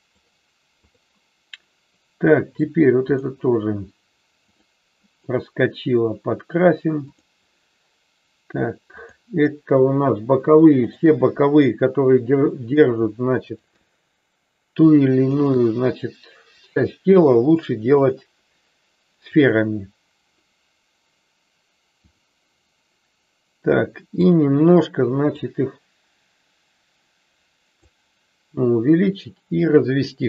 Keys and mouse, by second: 0.8 click, 3.1-4.4 drag, 4.7 click, 7.1 click, 8.9-10.2 drag, 15.3-16.7 shift+drag, 18.0-19.7 drag, 24.3 click, 25.3-30.2 drag.